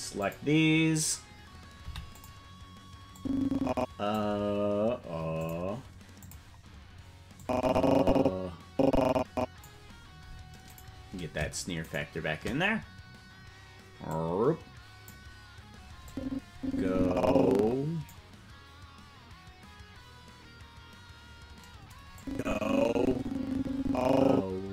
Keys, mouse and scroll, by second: 0.1 click, 1.8 i, 3.1-4.2 drag, 5.4 click, 6.2 click, 7.3-9.6 drag, 10.9 right click, 12.0 shift+right click, 14.0-15.1 drag, 16.0-18.1 drag, 22.1-24.7 drag.